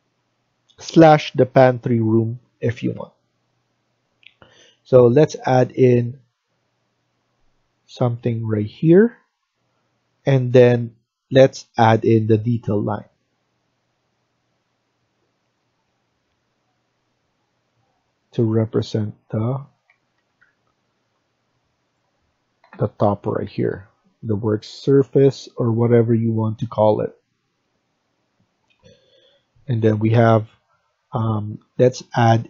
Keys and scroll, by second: 8.4 Escape, 8.7 Escape, 8.9 Escape, 19.7 Escape, 20.0 Escape, 20.3 Escape, 22.6 Down, 23.3 Escape, 23.6 Escape.